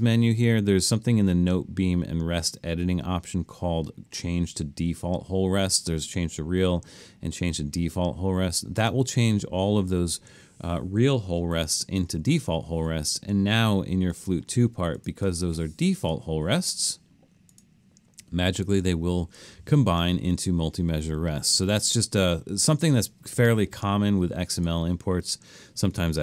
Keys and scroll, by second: 11.6 alt+super+., 12.1 alt+super+..